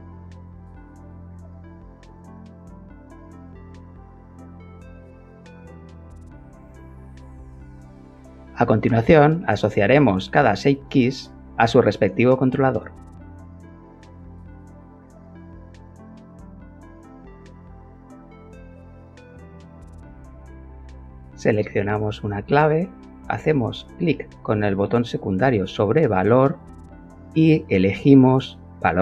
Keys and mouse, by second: 1.0 Escape, 3.3 click, 4.1 click, 4.8 click, 6.9 click, 8.6 middle click, 9.8 click, 13.5-15.2 drag, 18.8 click, 22.1-23.2 right drag, 23.2 click, 24.7 click, 26.6 click, 28.5 click.